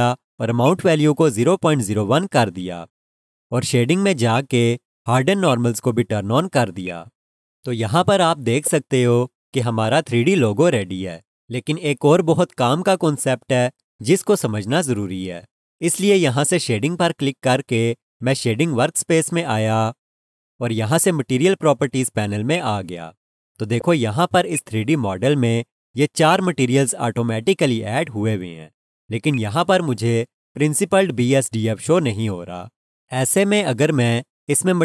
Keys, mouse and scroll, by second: 1.3-2.6 typing, 1.3 click, 4.3 click, 8.4-9.4 scroll up 1, 9.4-11.0 scroll down 1, 17.7 click, 22.5 click, 23.6-24.3 scroll up 1, 24.3 scroll, 24.5 alt+shift+click, 27.5 click, 29.2 Left, 29.3 alt+click.